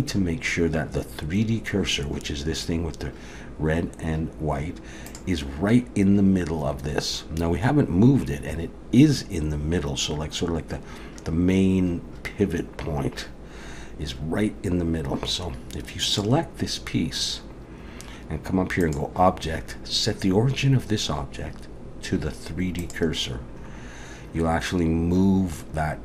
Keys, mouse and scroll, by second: 5.1 click, 16.1 click, 18.8 click.